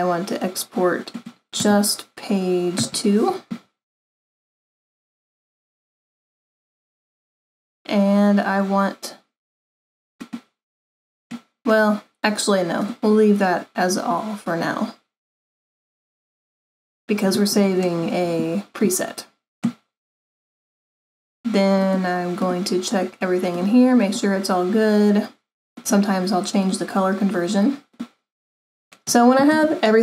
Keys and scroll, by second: 2.8 2.